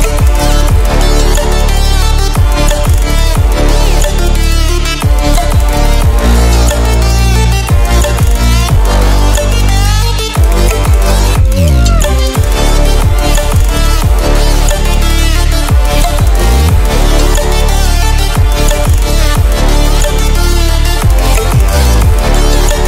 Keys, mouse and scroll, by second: 0.2 ctrl+w, 0.9-5.3 drag, 9.9 ctrl+w, 12.6 ctrl+w, 14.9 click, 17.3 click, 19.9 click.